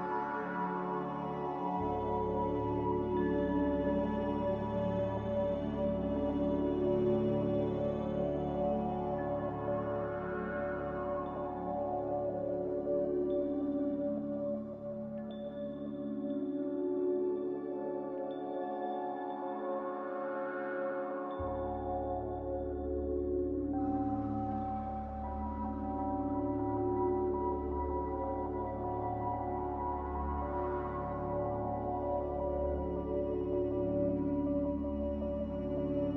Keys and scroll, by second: 1.5 5, 1.6 Return, 6.3-7.0 typing, 10.0 ctrl+c, 13.1 ctrl+v, 21.4 n, 26.6 a, 33.1 ctrl+j.